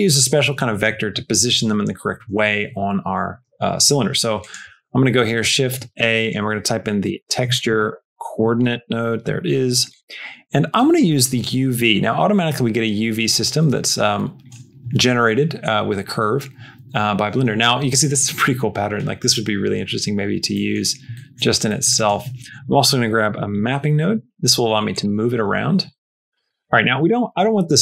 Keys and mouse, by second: 4.3 shift+click, 4.5 shift+a, 10.7 click, 11.4-14.4 drag, 20.5 middle click, 21.1 middle click, 21.5 middle click, 21.8 click, 22.1 shift+a, 23.6 p, 26.4 click.